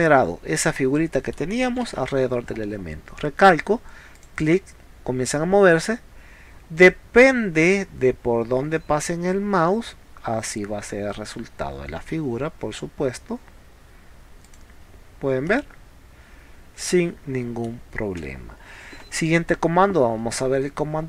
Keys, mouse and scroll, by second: 2.0 ctrl+z, 2.5 middle click, 4.2 click, 14.5 click, 15.1 scroll down 1, 15.5 middle click, 18.2 space.